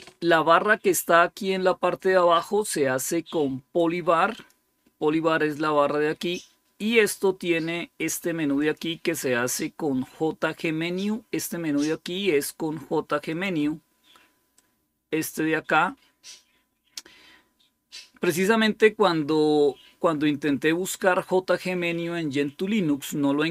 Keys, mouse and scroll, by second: 2.6-3.7 drag, 4.2 click, 8.5 click, 13.2 click, 20.9 click.